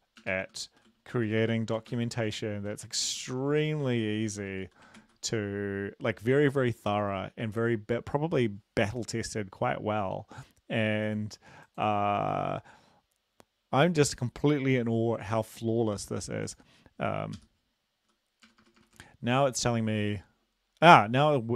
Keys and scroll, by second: 0.4 Home, 0.9-4.6 typing, 2.2 End, 5.0 ctrl+s, 15.3 ctrl+`, 17.4 Up, 18.5 BackSpace, 18.6 BackSpace, 18.8 BackSpace, 18.9 BackSpace.